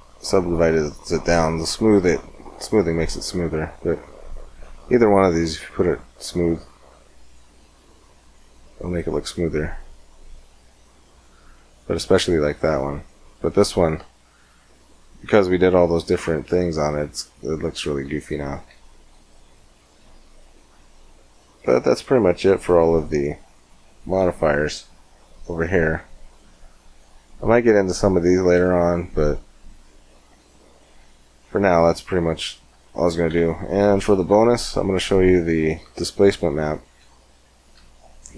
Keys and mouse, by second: 5.2-7.2 drag, 8.0 middle click, 8.9-9.9 middle drag, 9.9 click, 10.1 middle click, 10.5-11.8 drag, 12.8-14.5 middle drag, 14.5 Tab, 18.1 Tab, 18.5 x, 23.4-24.5 middle drag, 24.5-26.3 drag, 33.1 x, 34.1 shift+a, 37.6 s.